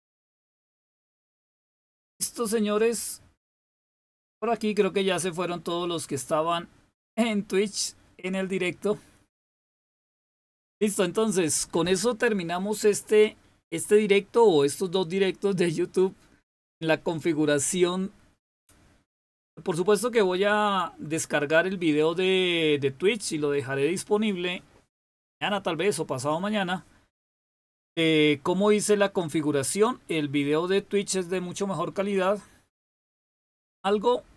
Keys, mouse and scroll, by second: 1.1 click, 9.5 click.